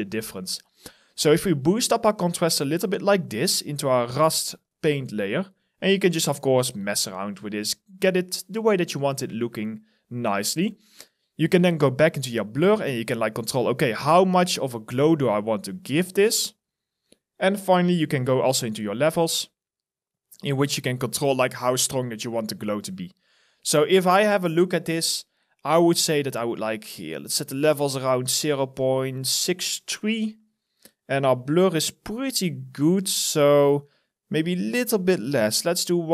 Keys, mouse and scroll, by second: 3.5 alt+right click, 4.3 alt+click, 8.0 alt+middle click, 8.6 alt+click, 9.4-10.5 scroll up 1, 22.9 alt+right click, 23.5 alt+click, 23.9 alt+middle click, 24.0 alt+scroll up 1, 24.6 alt+middle click, 24.8 alt+right click.